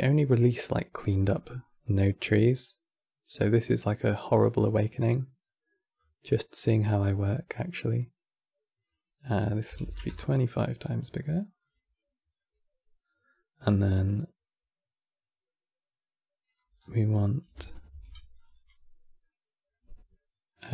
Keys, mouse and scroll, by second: 1.1-2.3 middle drag, 2.3-7.0 drag, 8.5-11.4 drag, 12.0 scroll up 3, 12.8 scroll down 2, 13.5-16.1 middle drag, 16.1 click, 16.5 scroll down 4, 16.7 middle click, 17.7 ctrl+shift+d, 18.4-20.7 middle drag.